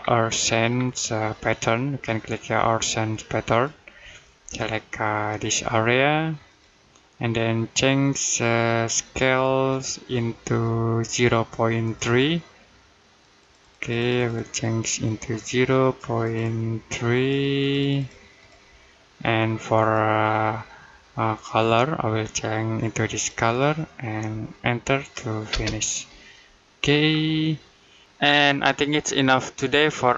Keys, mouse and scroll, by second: 3.3 click, 9.5 click, 22.9 click, 25.3 space, 26.9-27.3 scroll down 1, 27.3 middle click.